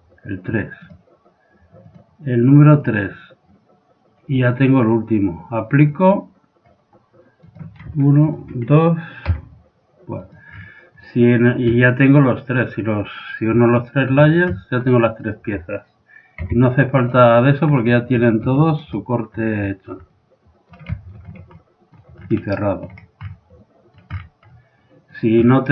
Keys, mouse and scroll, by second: 1.9-3.8 drag, 5.8-7.7 drag, 7.5-10.1 right drag, 9.2 x, 10.2 right click, 10.9-11.9 drag, 12.6-15.1 drag, 12.6 middle click, 13.8-15.3 middle drag, 15.3-16.5 right drag, 16.2 middle click, 16.5 g, 16.8 click, 17.3 middle click, 19.7-25.7 middle drag.